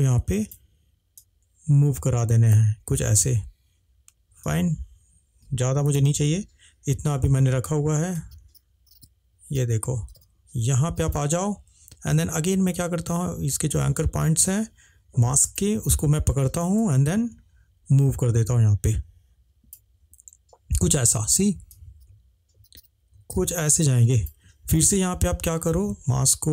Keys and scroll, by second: 6.2 ctrl+z.